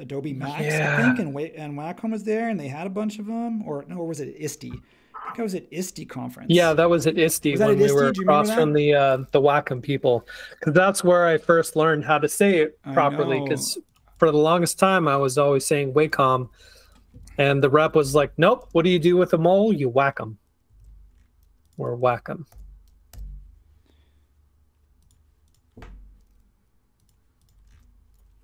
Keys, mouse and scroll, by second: 8.0 space, 16.4-18.6 typing, 20.8 super+z, 22.5 super+g, 23.1 b, 27.7 space.